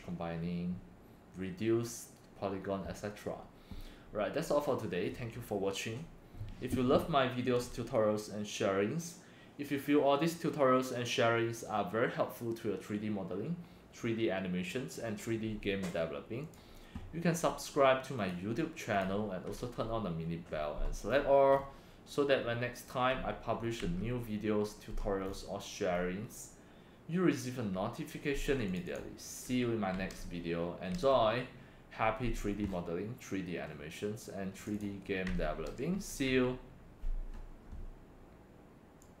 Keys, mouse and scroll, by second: 16.4 click, 18.2 click, 18.3 click, 18.9 click, 19.6 Right, 21.1-21.6 scroll up 3, 22.4 scroll down 1, 23.8 Right, 25.2 scroll up 5, 25.9 scroll up 2, 28.7 click, 28.8 click, 29.9 Right, 31.0 Right, 32.6 scroll up 3, 34.6 click, 34.7 click, 35.7 Left, 35.9 Left, 36.2 Left, 39.0 click.